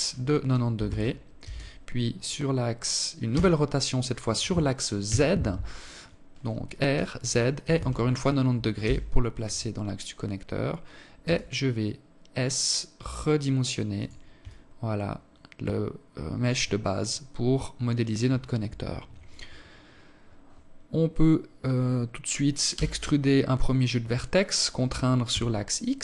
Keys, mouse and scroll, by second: 1.9 r, 8.8 scroll up 3, 9.1-10.0 scroll down 1, 10.0 s, 13.2 alt+click, 17.4 KP_7, 21.5 e.